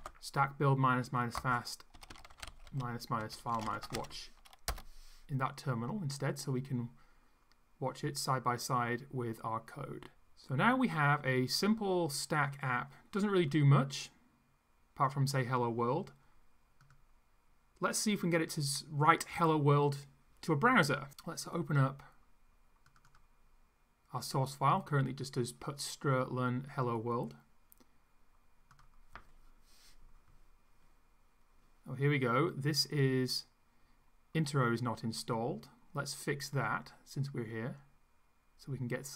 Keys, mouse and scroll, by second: 0.0-4.4 typing, 4.7 Return, 12.2 click, 21.1 click, 22.8 click, 28.8 click, 31.5 scroll up 2.